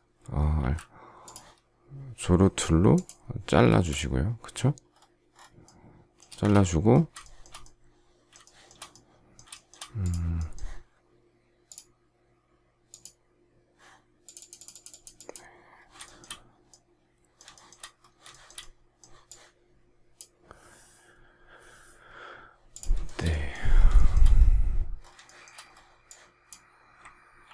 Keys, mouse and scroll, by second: 0.5 alt+x, 3.6 space, 6.2 space, 6.3 Escape, 7.1 shift+middle click, 8.3 shift+middle click, 9.6 shift+middle click, 15.9 shift+middle click, 17.4 shift+middle click, 18.2 shift+middle click, 23.0 shift+middle click, 23.1 shift+double middle click, 23.9 shift+middle click, 25.2 shift+middle click, 27.3 ctrl+g.